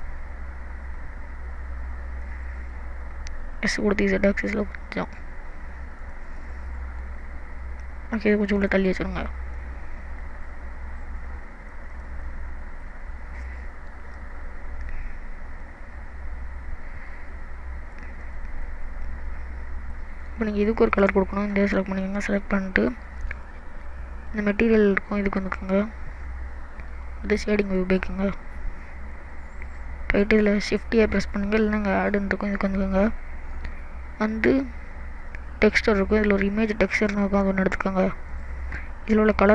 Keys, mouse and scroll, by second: 3.8 s, 6.3 click, 6.7 middle click, 8.6 click, 9.6 click, 11.9 click, 12.3 middle click, 14.3 ctrl+z, 15.6 click, 18.3 click, 18.7 middle click, 20.8 click, 22.4 middle click, 25.6 click.